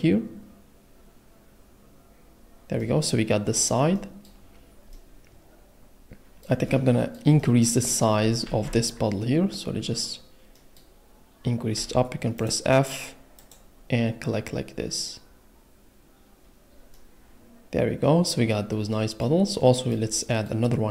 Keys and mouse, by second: 2.8 middle click, 4.9 middle click, 7.4 middle click, 8.8 ctrl+z, 11.7 f, 12.4 click, 16.9 click.